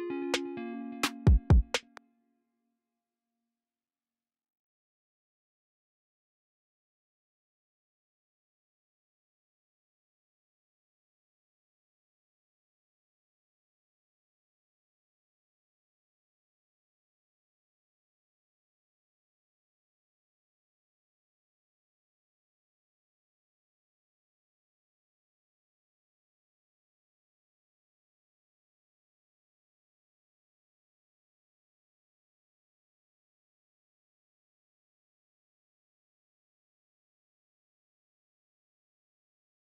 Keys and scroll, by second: 0.7 x, 1.2 space, 2.5 x, 5.6-6.9 typing, 8.5 super+r, 9.4 super+a, 10.0 alt+shift+n, 11.7 c, 12.5 c, 14.1 c, 16.1 ctrl+super+r, 17.2 super+z, 20.0 c, 20.6 u, 21.1 ctrl+super+r, 21.5 c, 34.4 c, 36.6 ctrl+super+x, 38.2 c.